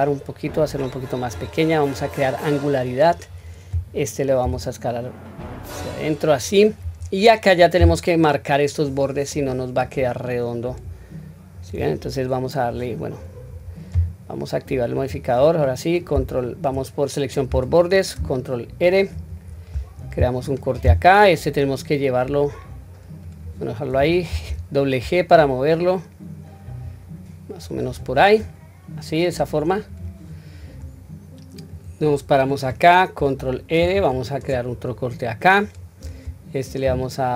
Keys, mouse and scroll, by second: 2.0-3.1 drag, 4.4 s, 6.2-6.9 scroll down 1, 6.9-7.5 scroll up 1, 9.2-10.0 scroll up 1, 10.7 click, 11.5 click, 15.0 click, 17.5 2, 19.1 ctrl+r, 29.9 click, 31.7 click, 33.7 ctrl+r, 36.8 s.